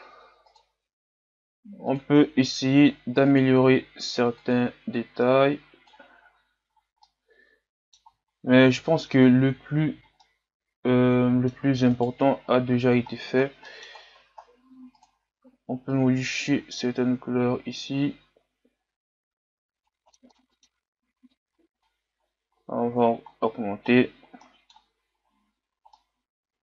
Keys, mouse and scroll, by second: 0.8 click, 2.1 click, 6.3 a, 6.8 scroll down 2, 7.0-8.3 middle drag, 8.3-10.1 scroll up 3, 10.1 scroll up 1, 10.3-11.9 middle drag, 11.9-14.3 right drag, 15.9 click, 19.9 a, 20.0 scroll down 2, 20.0 middle click, 20.3 scroll up 5, 20.4 middle click, 21.1-22.2 drag, 22.2-23.3 scroll down 2, 23.3-24.4 scroll down 3, 24.4-25.1 scroll down 1.